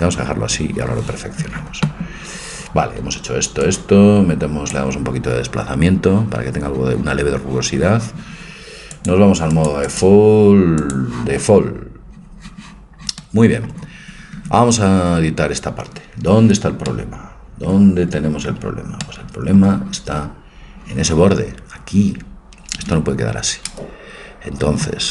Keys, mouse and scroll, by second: 4.8 click, 11.0 click, 11.9-13.2 drag, 13.2 middle click, 14.5 Tab, 16.9-18.4 middle drag, 18.6 middle click, 18.8 middle click, 23.7 c.